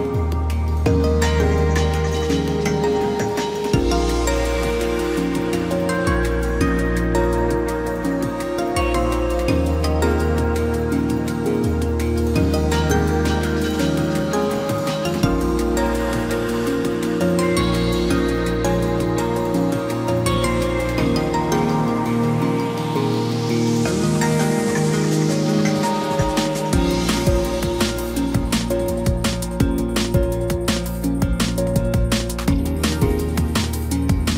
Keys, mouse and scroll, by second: 4.6 ctrl+t, 10.2 right click, 21.8 ctrl+t, 31.3 right click.